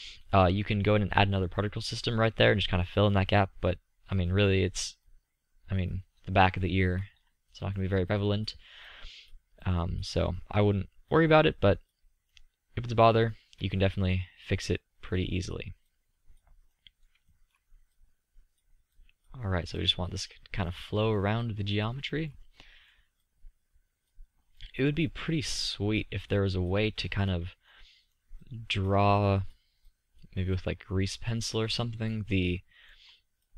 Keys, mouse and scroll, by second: 1.8 middle click, 2.0-3.7 middle drag, 3.7 click, 5.7-6.9 middle drag, 6.9 middle click, 7.0 click, 7.1 middle drag, 7.2 click, 7.2 middle click, 7.3 drag, 8.7-10.4 drag, 11.4-13.3 drag, 13.3-15.2 middle drag, 17.4-18.1 middle drag, 21.8 middle click, 22.9 middle click, 23.1-23.8 drag, 27.8 drag, 27.9 middle click, 27.9 click, 28.0 middle click, 29.2-32.8 drag, 32.6-33.2 middle drag.